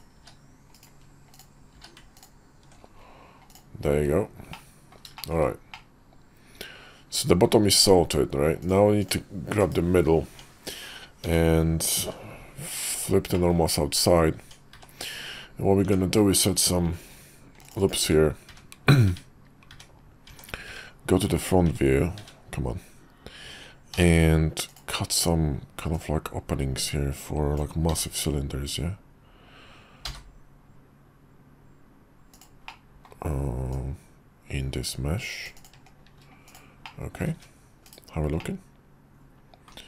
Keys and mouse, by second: 1.2 click, 1.7 q, 3.4-3.7 drag, 4.4-4.9 middle drag, 5.1 shift+middle click, 5.6-7.4 middle drag, 7.7 `, 8.5 click, 9.5 /, 10.2 Tab, 11.2 a, 11.9 alt+n, 13.3 middle click, 14.3 Tab, 14.7 `, 15.8 Tab, 16.8 ctrl+r, 17.9-22.1 typing, 20.2 Tab, 23.8 d, 25.8-26.8 middle drag, 26.8-32.4 drag, 32.6-33.0 middle drag, 36.4-36.8 drag, 36.8-37.1 middle drag, 37.2 `, 37.8 /, 38.3-39.6 middle drag.